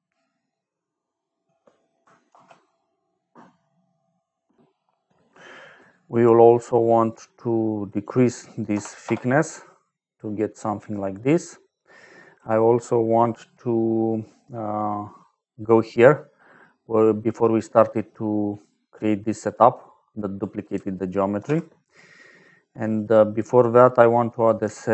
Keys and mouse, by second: 0.0 middle click, 2.2 ctrl+s, 7.0 click, 7.8 click, 8.6 KP_0, 8.9 Return, 10.5 middle click, 12.4 middle click, 16.6 middle click, 18.0 middle click, 19.4 click, 21.3 ctrl+j, 22.8 click, 23.0 click, 23.5 click, 24.3 click.